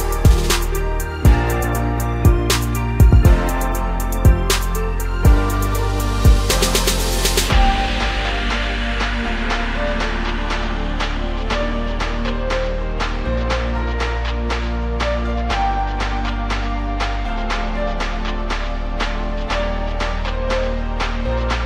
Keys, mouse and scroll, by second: 3.3 r, 6.2 s, 7.1 middle click, 8.1-9.0 scroll up 2, 9.0 click, 9.4 middle click, 10.0-11.1 scroll up 1, 11.1 ctrl+KP_Subtract, 11.9 x, 13.9-14.4 scroll down 8, 14.4 middle click, 14.9-15.2 scroll up 2, 15.5 KP_1, 15.9 Tab, 16.3-17.2 scroll up 1, 17.2 ctrl+1, 18.4-19.1 right drag, 19.1-21.5 middle drag, 21.5 scroll down 1.